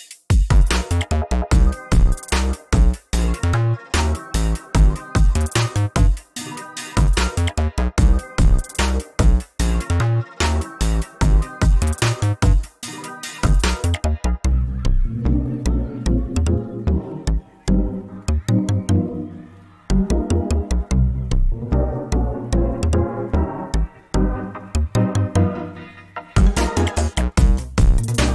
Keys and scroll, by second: 2.3 ctrl+s, 3.0 ctrl+t, 4.5 ctrl+t, 9.1 ctrl+t, 11.8 ctrl+space, 14.5 ctrl+space, 15.9 ctrl+t, 24.5 ctrl+s, 26.5 ctrl+t.